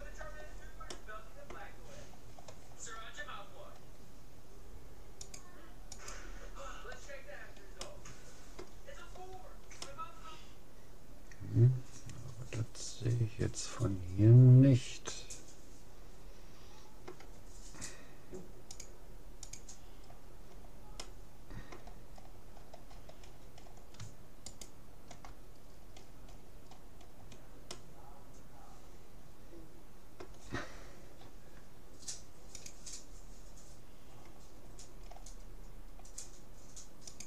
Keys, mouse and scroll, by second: 0.3-4.9 middle drag, 5.3-6.9 drag, 6.7-9.5 middle drag, 9.9-11.5 middle drag, 18.7-20.3 drag, 20.1-25.5 middle drag, 24.5-26.1 right drag, 26.1-29.5 middle drag, 27.7 scroll up 1.